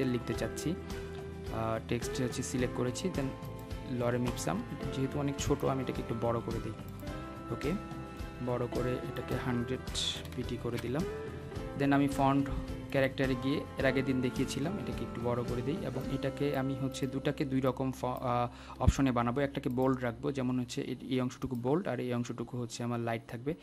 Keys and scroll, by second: 12.9 Return.